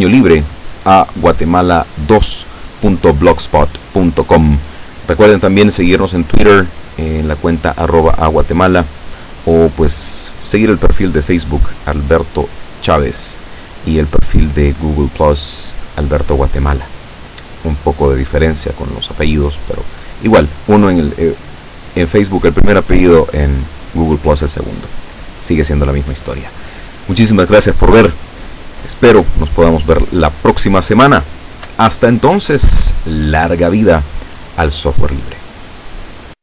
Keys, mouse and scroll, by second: 30.4 scroll down 2, 31.3-31.9 shift+middle drag, 32.1-32.6 shift+scroll up 5.